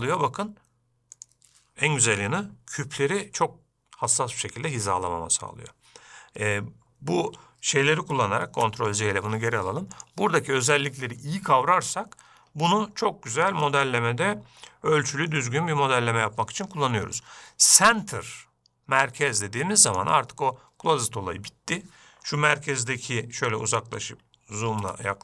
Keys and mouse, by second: 8.9 ctrl+z, 10.3-20.7 drag.